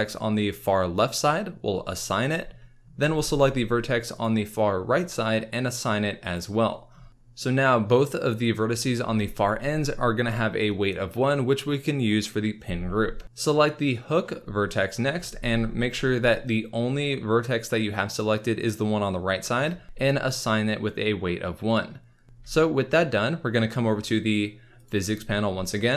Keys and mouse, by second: 2.0 click, 6.3 click, 15.3 alt+a, 20.3-22.2 drag, 22.4 Tab, 24.7 click.